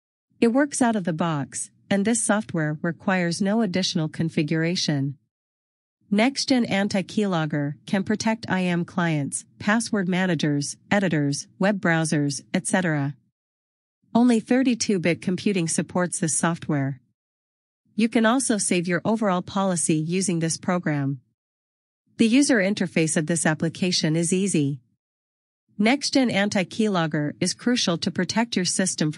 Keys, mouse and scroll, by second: 8.1 scroll up 1, 10.0 scroll up 1, 12.1 scroll down 1.